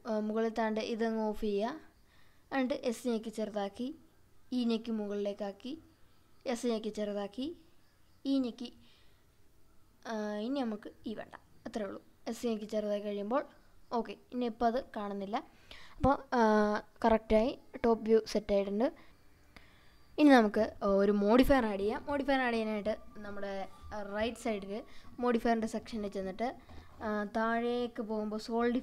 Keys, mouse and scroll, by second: 0.9 click, 2.3 s, 4.3 click, 4.8 e, 6.3 click, 7.1 s, 11.1 click, 11.5-12.1 scroll down 2, 12.3 Tab, 13.3 scroll down 1, 13.8-14.9 middle drag, 18.0 Tab, 20.1 Tab, 24.0 drag, 24.7-28.8 drag.